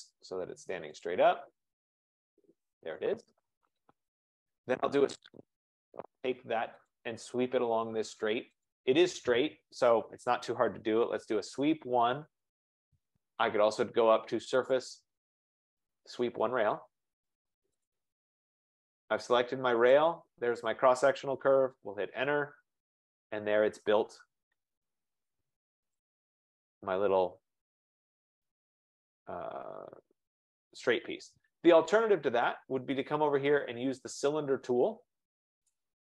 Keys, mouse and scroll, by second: 1.1 click, 1.8-2.5 scroll, 4.2 click, 4.7 click, 5.6-6.3 scroll, 6.3 click, 7.0 click, 8.7 click, 10.7-12.1 typing, 12.4 Return, 14.5 typing, 15.2 click, 16.4-17.7 typing, 16.6-17.7 drag, 21.6 Return, 22.4 Return, 26.1 click, 26.9-27.3 scroll down 4, 27.6 scroll, 29.9 F15, 33.0 F15, 35.7-36.0 drag.